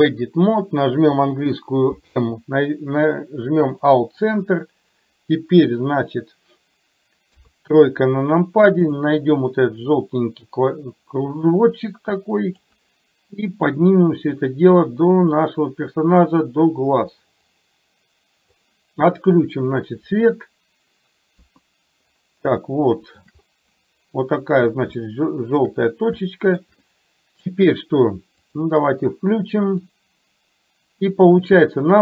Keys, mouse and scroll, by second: 1.9 m, 7.3 KP_3, 8.9 click, 9.9-12.8 drag, 13.8-18.6 drag, 21.4 KP_1, 22.7 shift+middle click, 25.1 shift+middle click, 26.3 shift+middle click, 29.9-31.6 drag.